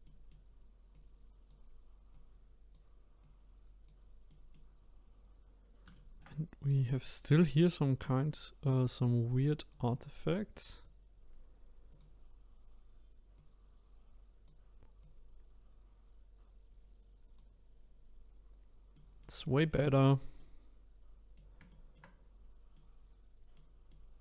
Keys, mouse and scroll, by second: 0.0 middle click, 0.9-4.3 drag, 4.3-6.3 middle drag, 6.3-6.8 scroll up 2, 6.8-8.2 middle drag, 8.2-18.1 drag, 18.3-18.9 scroll down 1, 18.9-20.0 middle drag, 20.0-20.4 scroll down 2, 20.4-22.4 middle drag, 22.4-22.7 scroll down 1, 22.7-24.2 middle drag.